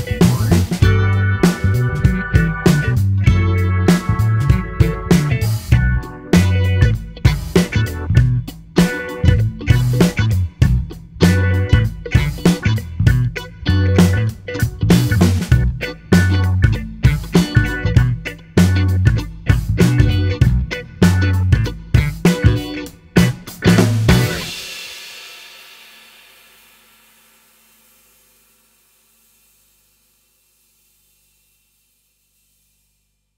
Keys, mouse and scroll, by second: 1.2-3.3 drag, 3.3 middle click, 4.0 click, 4.9 click, 11.9 click, 13.6-16.6 drag, 21.9 click, 24.7 click, 25.3-27.9 middle drag, 27.9 space.